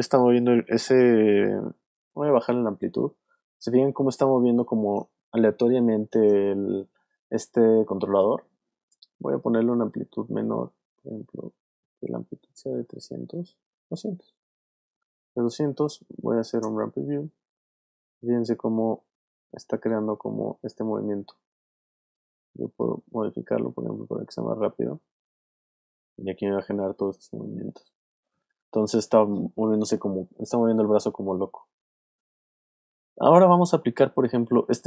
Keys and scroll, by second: 2.1 space, 16.5 space, 32.0 space.